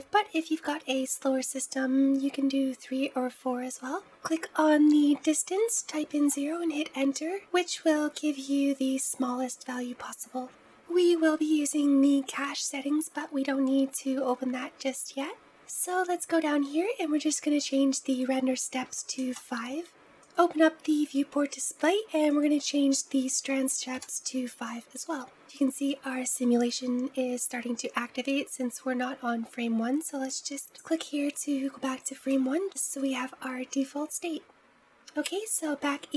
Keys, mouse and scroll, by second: 3.8-6.9 drag, 10.7-13.7 scroll down 11, 13.7-15.4 scroll down 3, 15.5-16.7 scroll down 6, 16.7-17.9 scroll up 3, 17.9-19.7 drag, 20.0-20.9 drag, 20.9-22.1 scroll down 4, 22.1-25.3 drag, 26.3-26.7 scroll down 1, 26.7-28.0 scroll up 1, 28.0-28.9 scroll up 1, 28.9-29.7 scroll up 1, 30.7-32.1 drag, 32.1-32.6 shift+middle drag, 35.8 scroll down 6.